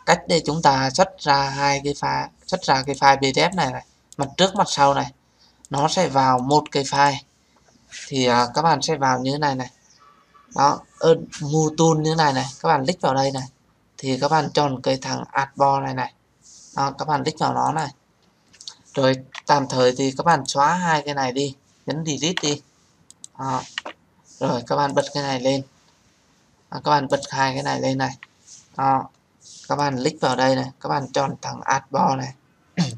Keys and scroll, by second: 22.2 Delete.